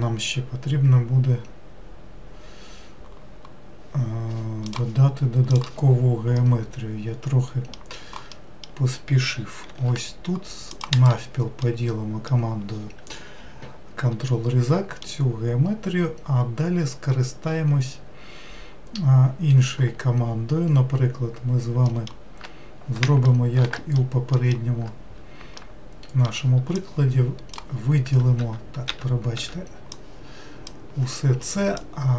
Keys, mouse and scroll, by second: 5.5 click, 6.3-9.6 middle drag, 9.6 ctrl+r, 11.6-17.4 middle drag, 21.8 alt+middle click, 23.0 shift+middle click, 24.3 alt+middle click, 25.6-26.8 shift+middle drag, 26.8 click, 28.4 w, 28.9 w, 29.4 w, 29.9 click, 31.8-32.1 shift+drag.